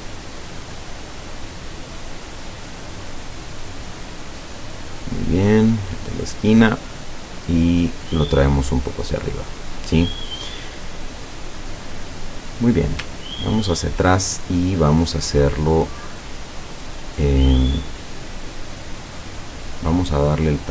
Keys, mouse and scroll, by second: 3.1 click, 4.9 click, 6.6-9.5 drag, 12.6 click, 13.3-14.1 ctrl+scroll down 4, 14.4-15.6 ctrl+middle drag, 18.5-20.7 drag.